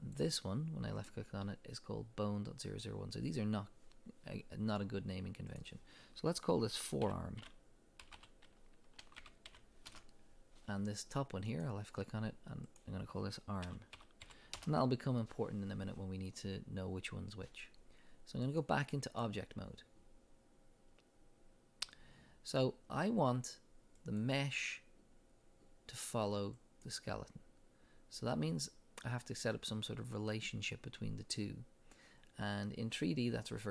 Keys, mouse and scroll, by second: 0.0 click, 5.5-11.6 drag, 9.9 Return, 12.7-24.2 drag, 14.6 Return, 26.5 click.